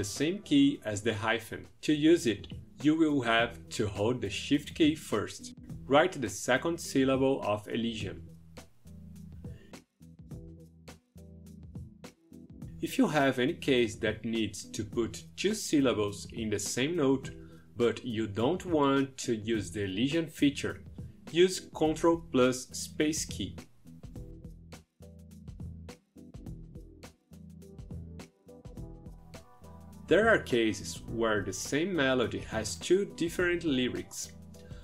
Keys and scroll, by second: 3.4 shift+-, 5.7-8.4 typing, 9.9 space, 22.2 ctrl+space, 23.6 e, 25.2-26.5 typing.